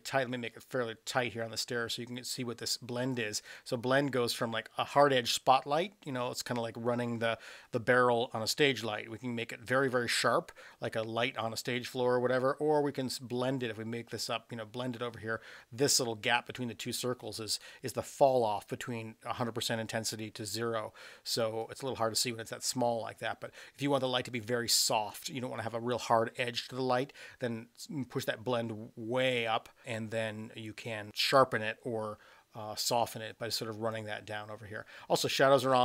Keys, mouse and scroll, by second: 3.1-14.9 drag, 21.6-25.2 drag, 28.2-33.9 drag.